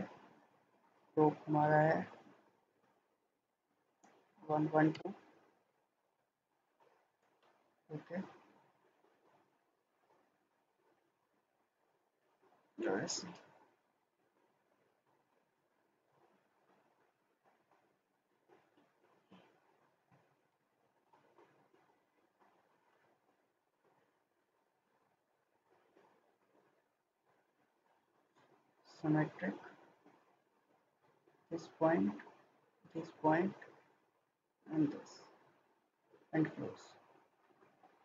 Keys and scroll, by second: 4.4-4.7 typing, 4.9 Return, 7.3 Escape, 14.9 Escape, 20.1-20.4 typing, 22.9 Return, 27.2 Escape.